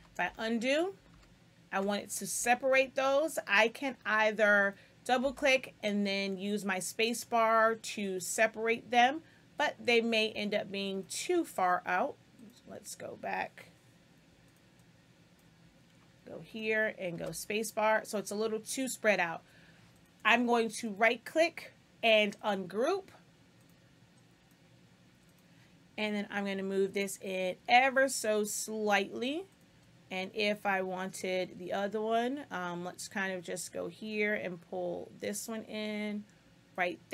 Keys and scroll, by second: 2.3 space, 5.1 space, 17.1 space.